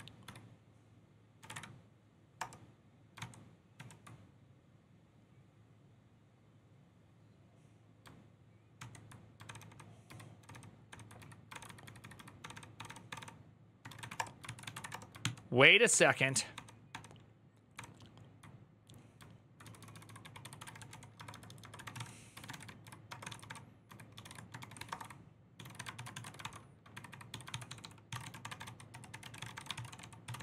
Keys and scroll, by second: 0.0-1.7 typing, 2.1 Return, 2.9 ctrl+t, 3.5 ctrl+n, 8.5 ctrl+t, 9.2 ctrl+d, 9.3 ctrl+d, 9.4 ctrl+d, 10.9-14.9 typing, 11.3 ctrl+d, 15.0 ctrl+t, 15.7 ctrl+d, 15.8 ctrl+d, 16.3 ctrl+d, 19.4 ctrl+d, 19.4-30.4 typing.